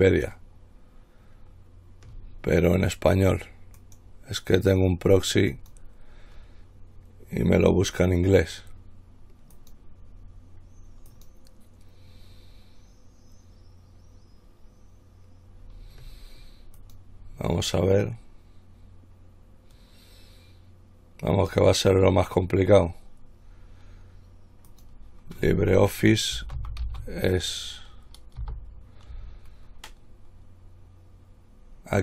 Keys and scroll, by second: 26.8-27.6 typing, 28.6 typing.